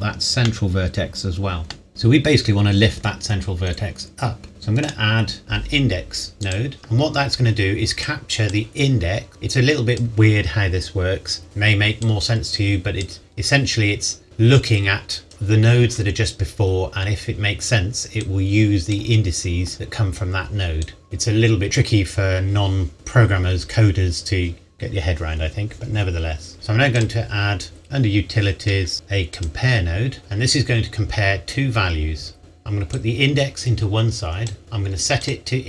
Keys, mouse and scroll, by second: 0.4 middle click, 4.8 click, 6.4 click, 18.2 click, 20.8 click, 27.0 click, 29.3 click, 30.7-31.4 scroll up 1, 32.9 click, 35.2 click.